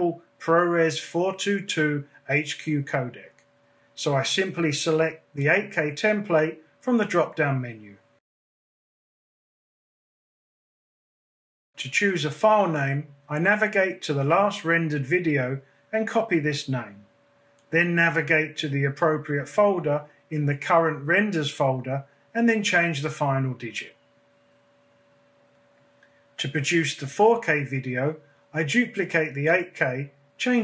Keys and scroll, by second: 20.1 BackSpace, 20.6 5.